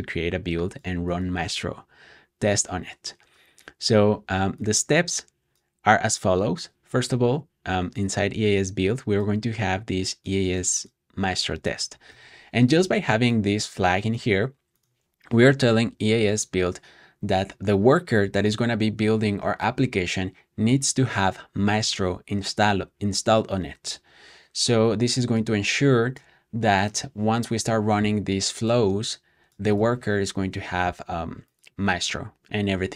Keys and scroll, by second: 12.0 super+s.